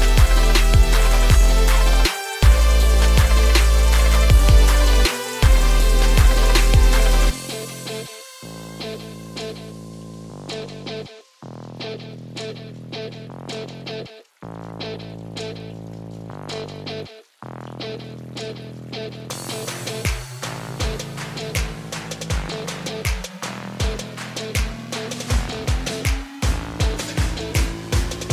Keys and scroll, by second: 10.3 ctrl+space.